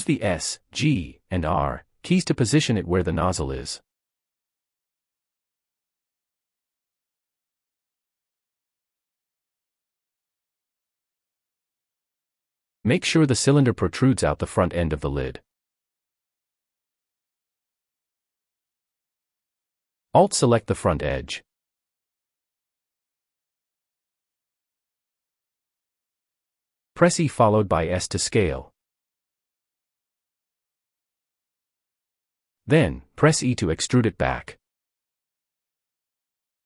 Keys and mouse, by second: 1.8-3.1 typing, 2.9 Return, 4.5 click, 5.0 click, 5.8 shift+middle click, 6.5 shift+middle click, 7.4 shift+middle click, 8.1 g, 8.2 z, 9.1 s, 9.9 click, 11.1 middle click, 11.1 click, 12.3 click, 14.6 g, 15.1 x, 18.0 middle click, 21.4-23.0 middle drag, 28.0 e, 28.8 s, 32.2 middle click, 33.4 e, 36.3 click.